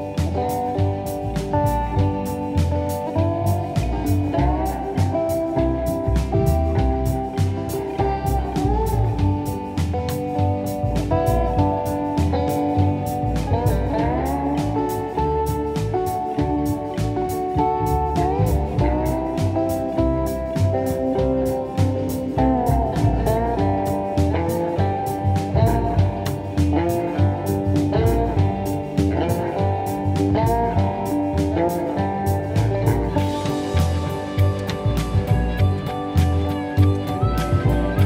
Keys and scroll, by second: 5.7 /, 19.1 ctrl+d, 19.2 Escape, 27.9 ctrl+d, 28.1 Escape, 30.9 F1, 31.1 F2, 33.5 F1, 33.8 F2.